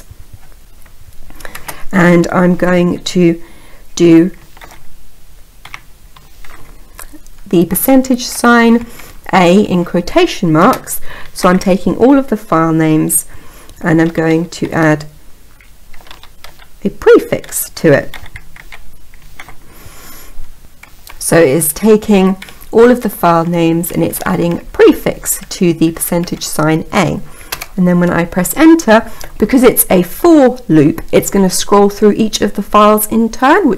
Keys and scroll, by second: 27.2 Return.